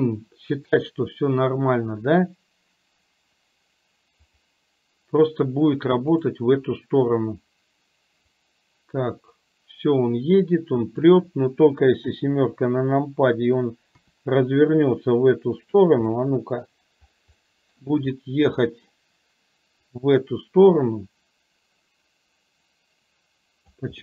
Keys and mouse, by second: 0.7 click, 4.3 click, 8.6-11.0 drag, 12.0 KP_7, 14.0 r, 16.2-16.8 middle drag, 17.4-17.9 middle drag, 18.7 middle drag, 19.9-23.8 drag.